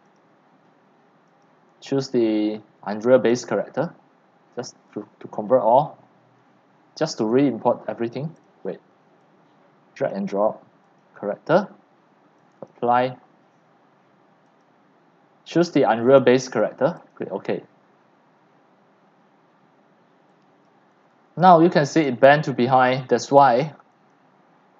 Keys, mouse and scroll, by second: 0.0-9.0 drag, 9.2-19.1 drag, 20.9 click, 21.1 scroll down 4, 21.3 scroll up 4, 21.5-24.7 typing, 22.1 click, 24.1 click.